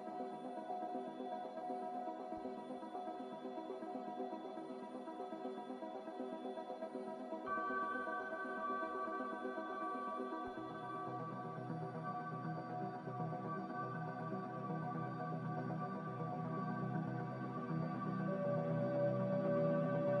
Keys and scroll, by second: 2.3 z, 5.1 BackSpace, 5.6 1, 5.7 5, 8.9 BackSpace, 11.5 Return, 11.5 2, 11.5 0, 16.0 a, 16.7 Delete, 19.5 z.